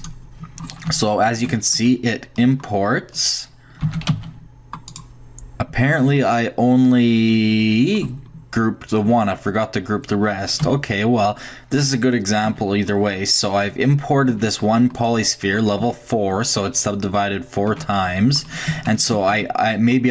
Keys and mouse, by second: 0.0 click, 3.8 shift+g, 7.4-10.7 middle drag, 9.1 Tab, 10.6 x, 12.5 Tab, 14.7 Tab, 15.8 Tab, 16.1 click, 17.7 Tab, 19.3 Tab.